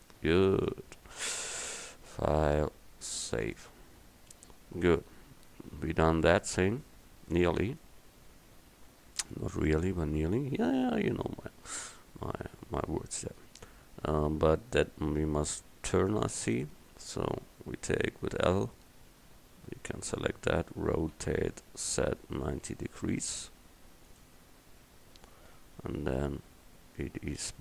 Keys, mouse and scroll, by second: 0.7-1.4 drag, 2.4-4.1 drag, 16.5 Tab, 18.2 l, 19.4 l, 21.2 r, 24.6 r, 24.9 Tab.